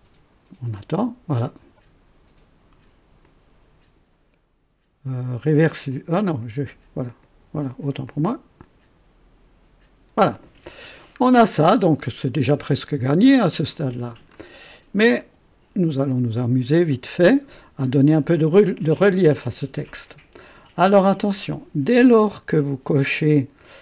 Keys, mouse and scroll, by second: 3.2-4.2 drag, 5.9 click, 6.4 click, 7.2 click, 8.0 click, 11.2-11.5 scroll down 2, 11.8 scroll up 1, 12.0-14.5 drag, 14.6 scroll up 2, 15.2 right click, 16.1-16.9 drag, 17.0 scroll up 2, 20.3 click.